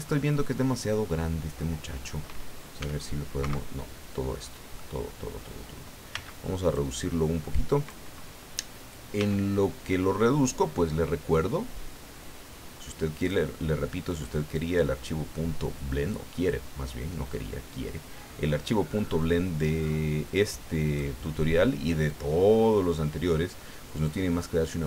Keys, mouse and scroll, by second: 0.1-1.4 middle drag, 1.6 scroll up 1, 2.8 s, 4.3 middle click, 5.0 scroll up 1, 6.1 b, 6.7-8.1 drag, 9.2 s, 13.2 click, 14.5-21.1 drag, 22.1-24.8 drag.